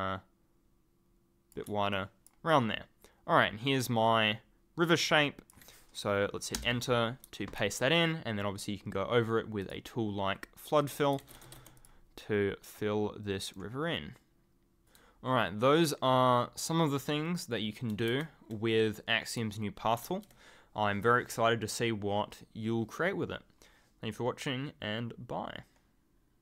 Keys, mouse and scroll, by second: 1.9 ctrl+click, 3.9-4.8 ctrl+scroll up 1, 5.2-6.0 ctrl+scroll up 1, 6.5 Return, 7.2 w, 9.6 click, 10.8 click, 10.9-12.0 typing, 11.7 click, 13.5 right click, 14.8 ctrl+click, 18.1 ctrl+z, 19.2 click, 20.0 ctrl+z.